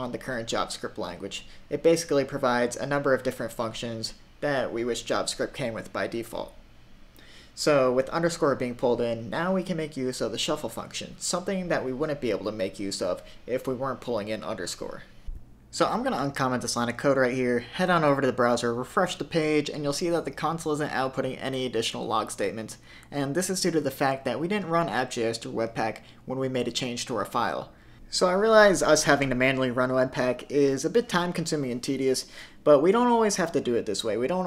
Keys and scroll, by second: 15.2 super+/, 16.1 super+s, 17.6 super+r, 27.0 super+Tab, 27.2 super+Tab, 33.4 super+s.